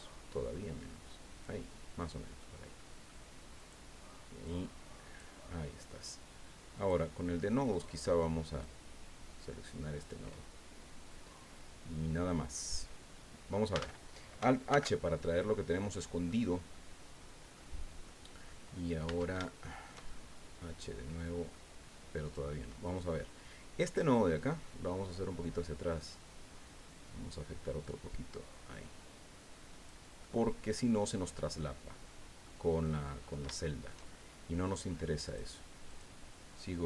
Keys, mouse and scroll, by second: 2.0 click, 2.8 click, 3.6 right click, 4.4 click, 6.8 click, 7.7 right click, 8.6-10.2 drag, 10.3-11.0 scroll down 2, 11.1-13.7 middle drag, 13.7 Tab, 14.7 alt+h, 15.2 alt+scroll down 1, 15.5 click, 16.7-17.7 drag, 18.0 click, 19.0 Tab, 19.4 shift+click, 20.1-21.7 shift+drag, 22.8 right click, 24.3-25.8 drag, 25.8-26.1 scroll down 1, 26.5-27.1 scroll down 3, 27.5-28.2 scroll down 4, 30.2 click, 31.6-32.6 drag, 33.2-33.5 scroll up 3, 33.6 shift+click, 35.2 click, 35.9 click.